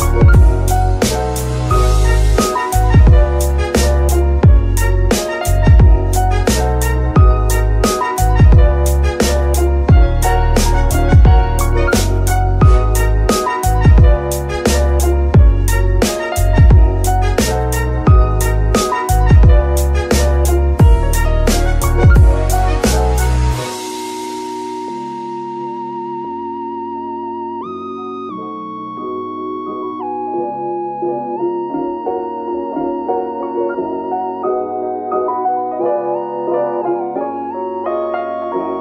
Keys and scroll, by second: 7.1 n, 11.1 KP_3, 12.9 g, 24.4 typing, 29.7 KP_3, 33.4 g.